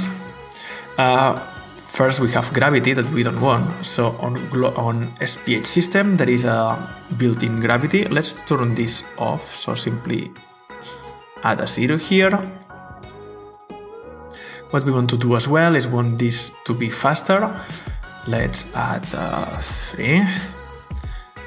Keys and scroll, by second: 7.9 0, 10.4-11.3 typing, 11.5 Return, 19.4 3, 19.7 Return.